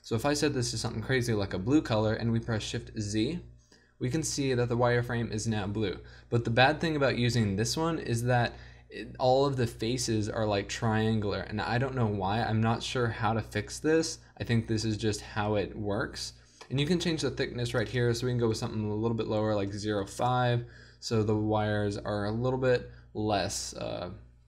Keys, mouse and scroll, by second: 0.0-1.4 drag, 1.4-2.2 middle drag, 2.2 shift+z, 17.8-19.9 drag.